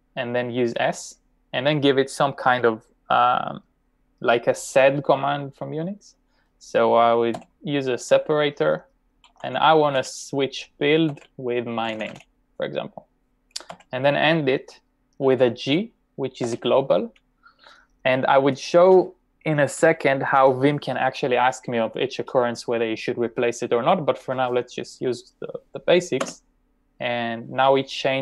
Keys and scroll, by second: 7.4 /, 8.9-9.8 typing, 11.1-12.4 typing, 13.8 /, 16.5 g, 26.3 Return.